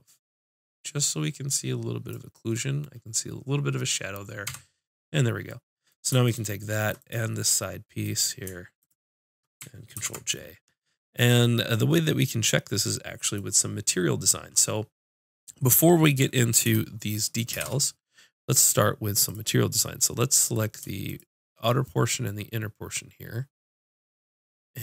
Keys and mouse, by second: 4.4 Tab, 5.0-6.3 middle drag, 6.3-7.9 drag, 9.9 ctrl+j, 17.6 shift+c, 19.9 click.